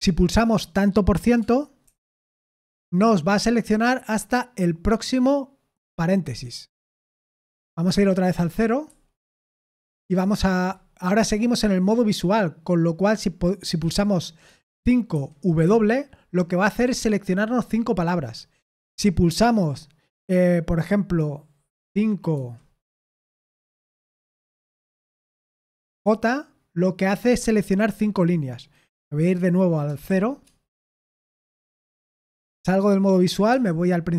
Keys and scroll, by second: 1.8 shift+5, 8.8 typing, 15.1-15.6 typing, 22.3 5, 25.1 j, 30.0-30.8 typing, 32.2 Escape, 33.4 0.